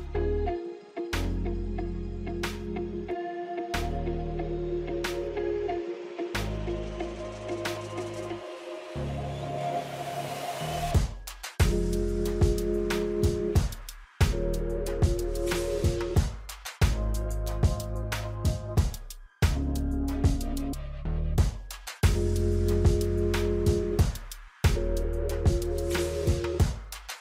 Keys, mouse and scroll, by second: 1.9 alt+scroll up 1, 2.6 space, 2.7 click, 3.0 space, 3.4-7.5 drag, 7.8 click, 7.9 alt+scroll down 1, 9.8 scroll down 1, 10.1 scroll up 1, 10.4 F9, 11.3 click, 11.9 alt+scroll up 1, 12.6 alt+scroll down 1, 13.0 space, 13.1 click, 13.3 space, 14.9-27.2 drag.